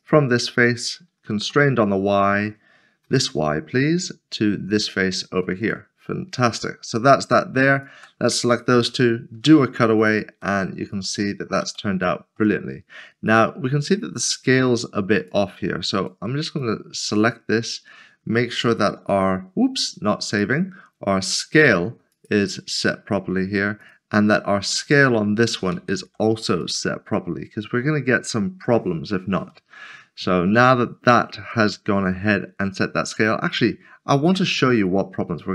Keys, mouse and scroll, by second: 0.0 click, 1.8 typing, 3.0 typing, 6.3 click, 6.5 middle click, 7.7 shift+click, 8.9 ctrl+-, 10.0 click, 10.4 middle click, 11.7 shift+middle click, 15.2 click, 18.7 ctrl+s, 20.3 click, 21.4 ctrl+a, 23.2 click, 25.7 ctrl+a, 26.6 click, 29.5 click, 29.7 middle click, 30.6 shift+middle click, 31.5 middle click.